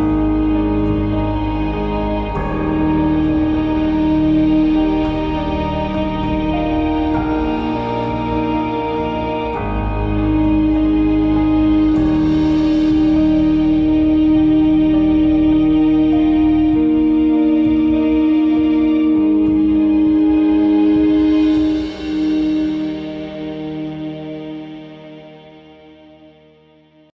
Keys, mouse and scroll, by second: 2.4 click, 6.0 click, 6.2 click, 10.9-16.9 drag, 18.3-19.4 drag, 23.0 shift+space, 23.9 click, 24.8 click.